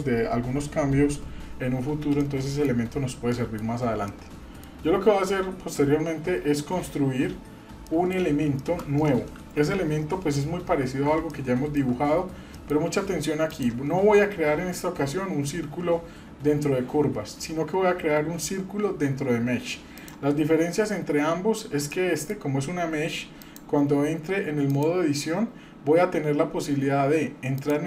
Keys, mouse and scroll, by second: 2.2-2.7 middle drag, 3.3 shift+middle click, 4.1-4.6 middle drag, 7.9 middle drag, 8.6 shift+middle click, 9.5 KP_7, 10.1 scroll down 2, 11.2 shift+scroll down 1, 11.3-11.9 shift+middle drag, 12.0 scroll up 2, 12.5-12.8 shift+middle drag, 13.5-20.1 drag, 20.9 scroll up 1, 21.5 scroll up 1, 21.9-22.4 shift+middle drag, 23.4-24.8 drag, 27.6 click.